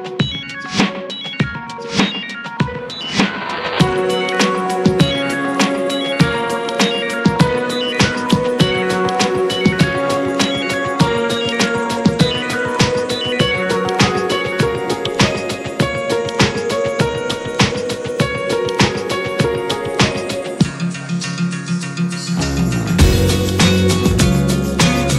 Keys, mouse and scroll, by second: 0.2 middle drag, 0.4 drag, 0.8-2.3 middle drag, 2.3 scroll down 1, 2.8 click, 4.0 ctrl+1, 4.3 click, 4.7-7.2 middle drag, 7.2-9.5 drag, 9.7 scroll down 5, 10.0 click, 10.6-11.2 middle drag, 11.2 click, 12.1 click, 12.4-12.7 scroll up 1, 12.7-14.0 middle drag, 14.0-20.8 drag, 21.1 click, 21.7-22.3 scroll up 6, 22.3-22.8 middle drag, 22.8 scroll up 4, 23.3 s, 24.7-25.1 scroll down 11.